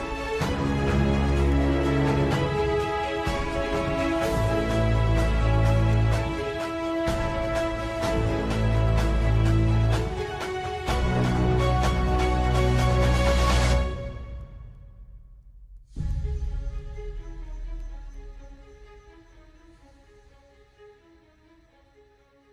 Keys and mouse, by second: 7.2 click, 8.3 middle click, 9.2 middle click, 9.9 middle click, 10.9 middle click, 13.9 middle click, 15.0 shift+click, 15.4 middle click, 19.2 middle click, 20.7 shift+click, 22.2 middle click.